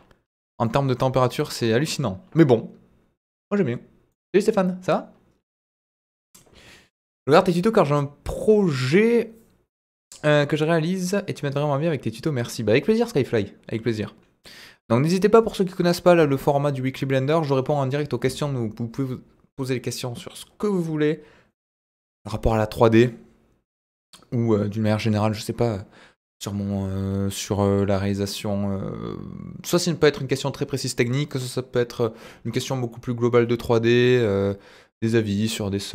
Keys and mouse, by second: 0.6-0.9 middle drag, 1.6-1.9 middle drag, 4.1-5.0 middle drag.